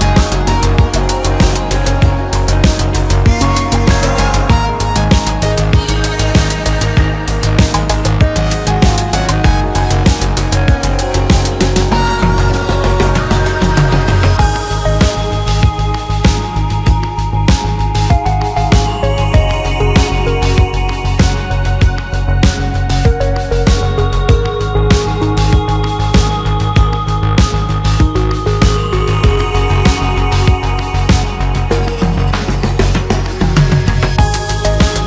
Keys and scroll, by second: 0.3 space, 0.4 Escape, 11.0 space, 23.3 shift+v, 29.1-29.9 typing.